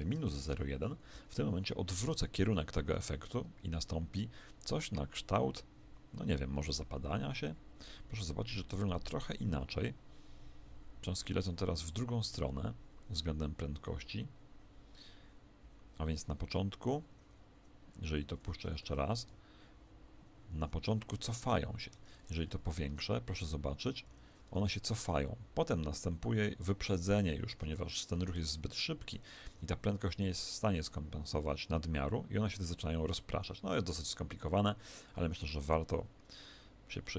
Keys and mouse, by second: 2.0 alt+a, 17.2-19.7 middle drag, 18.8 Escape, 18.8 alt+a, 20.5 Escape, 21.2 alt+a, 21.8 Escape, 22.0 middle click, 22.9 alt+a, 23.8 middle click, 24.0 Escape, 24.5 alt+a, 27.1 Escape, 29.5 alt+a, 29.5 middle click, 37.0-37.1 middle drag.